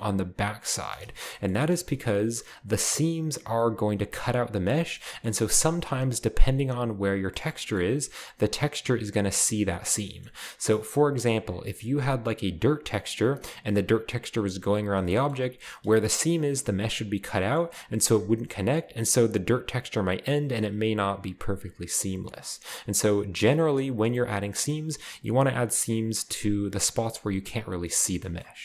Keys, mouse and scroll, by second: 0.4-0.8 scroll up 1, 0.8-1.2 scroll down 1, 1.2 scroll up 1, 1.4-3.8 shift+middle drag, 1.4 scroll down 1, 1.5-3.8 scroll up 1, 4.9-6.0 shift+middle drag, 5.3-6.7 scroll up 2, 6.7-7.3 scroll up 1, 7.3-8.7 shift+middle drag, 7.3-7.8 scroll up 1, 10.0-14.4 middle drag, 10.4-12.9 scroll up 1, 15.0-16.7 shift+middle drag, 17.4-19.3 shift+middle drag, 22.1-22.7 scroll down 4, 22.7 shift+middle click, 22.7-23.4 scroll up 2, 23.4-24.3 scroll down 2, 25.2-26.8 middle drag, 27.0 middle click, 28.2-28.6 scroll up 2.